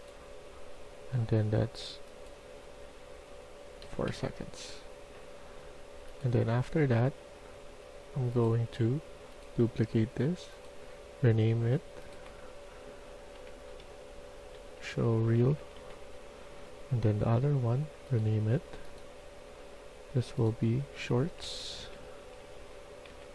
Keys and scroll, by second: 3.7 4, 13.2-16.2 typing, 21.1-23.0 typing.